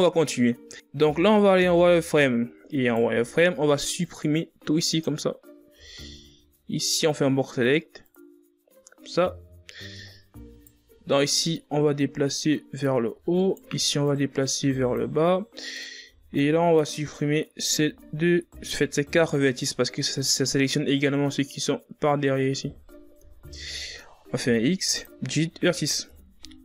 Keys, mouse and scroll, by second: 0.5 KP_3, 2.0-2.7 ctrl+scroll up 4, 2.9 z, 4.1 right click, 4.5 b, 7.1 x, 11.9 alt+right click, 12.9-14.7 drag, 14.7 alt+right click, 15.4-16.9 drag, 16.9 right click, 17.4 b, 19.2 x, 21.5-24.5 middle drag, 24.5 KP_3, 25.8 x.